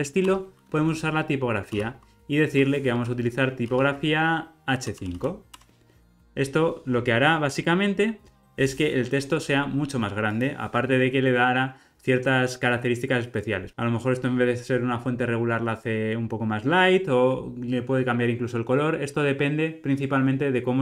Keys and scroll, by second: 0.3 Return, 5.5 Return.